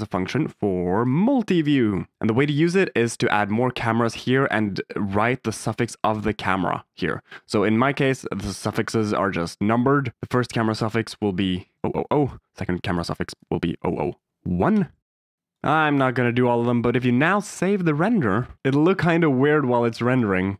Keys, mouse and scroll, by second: 1.9 drag, 3.4-8.7 drag, 11.0-12.2 drag, 11.8 0, 11.9 0, 13.1 click, 13.6 0, 15.3 click, 15.7 click, 18.3 click.